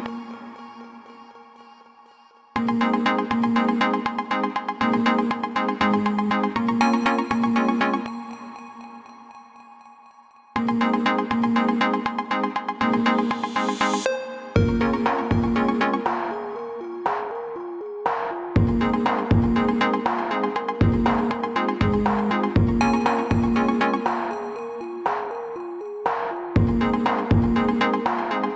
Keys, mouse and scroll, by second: 6.5 click, 9.5 click, 13.6 click, 18.0 alt+click, 23.8 click, 26.8 alt+click.